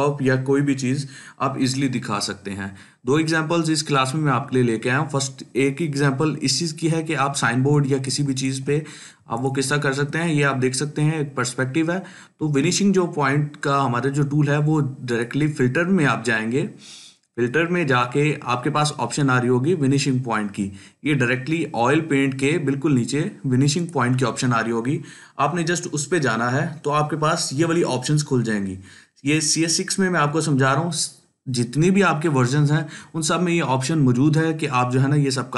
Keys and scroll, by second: 9.1-14.2 ctrl+space.